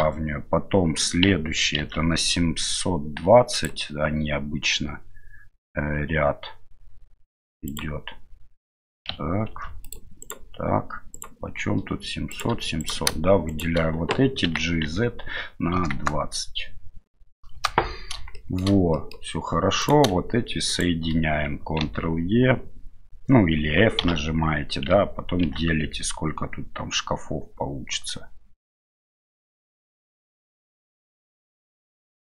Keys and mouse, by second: 1.8 ctrl+r, 9.5 ctrl+r, 11.1 right click, 12.3 shift+right click, 12.8 right click, 13.5 shift+right click, 14.4 g, 18.5 shift+middle click, 19.0 middle click, 19.8 right click, 20.7 shift+right click, 24.0 f, 25.4 ctrl+r.